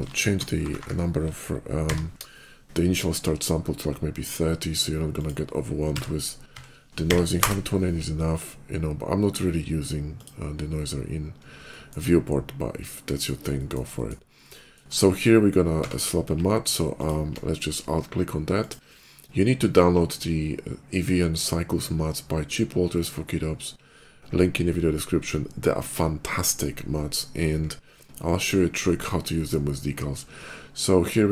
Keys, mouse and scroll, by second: 0.0-0.6 typing, 1.7 0, 2.0 Return, 4.9 click, 6.0 1, 6.3 2, 6.9 8, 7.2 Return, 10.0 click, 11.5 middle click, 11.9-13.1 shift+middle drag, 13.4 middle click, 13.8 middle click, 14.4 middle click, 15.0 shift+click, 15.6 q, 16.8 click, 16.8 q, 18.3 click.